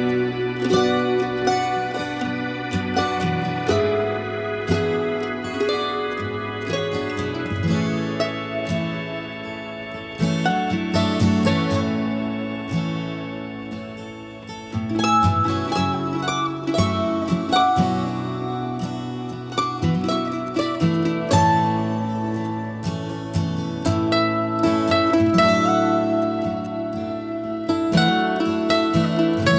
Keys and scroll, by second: 20.1 h, 21.8 ctrl+h.